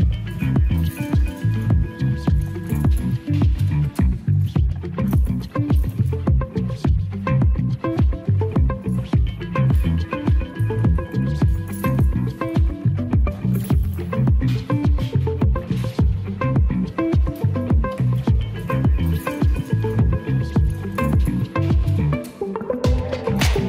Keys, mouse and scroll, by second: 0.3 2, 3.3 alt+shift+click, 4.5 shift+middle click, 5.3 s, 6.1 click, 10.9-11.8 middle drag, 12.3 w, 13.2 click, 16.2 click, 16.7 shift+middle click, 17.4 middle click, 19.4-21.8 drag, 21.9 middle click.